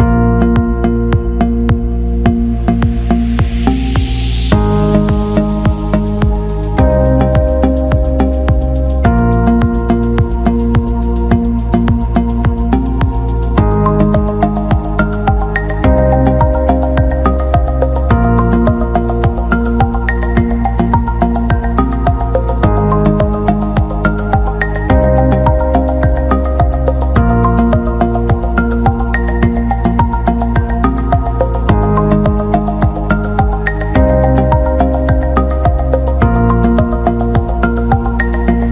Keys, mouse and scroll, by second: 6.0-8.4 middle drag, 8.6 ctrl+z, 9.4-11.1 drag, 11.1-13.0 middle drag, 14.1 middle click, 15.9-17.1 middle drag, 17.3 alt+shift+middle click, 18.3-20.3 drag, 21.0 click, 22.4 alt+middle click, 23.2 alt+middle click, 23.4 alt+shift+middle click, 24.1 alt+right click, 24.2 alt+middle click, 25.9 e, 29.1 click, 32.3-33.8 drag, 34.7 click, 35.9 alt+middle click, 36.4 alt+shift+middle click, 37.3 click.